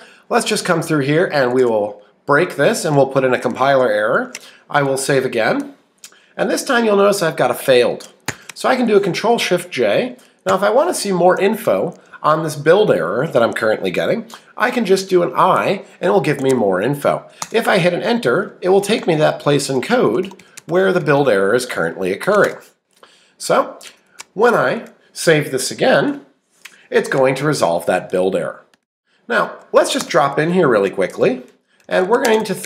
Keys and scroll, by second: 0.6 Down, 1.2-2.8 typing, 16.4 Escape, 17.4 Return, 18.8 Right, 20.7 shift+Right, 29.5 Up, 30.0 Return, 30.6-32.6 typing.